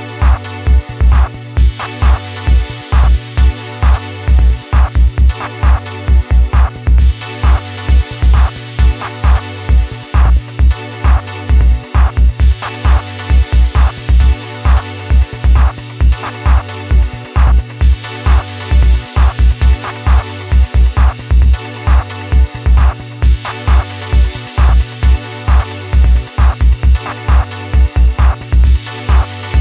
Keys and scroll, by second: 1.3 ctrl+shift+i, 10.0 ], 10.1 ], 19.3 ctrl+d.